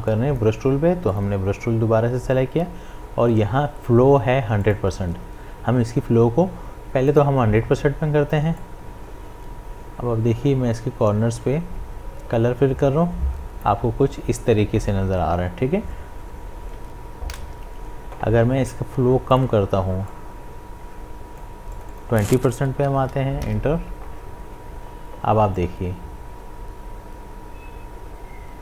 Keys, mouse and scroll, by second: 0.1 click, 4.6 click, 7.1-16.1 drag, 16.8 click, 17.2 ctrl+z, 19.3-21.8 drag, 25.6-28.6 drag.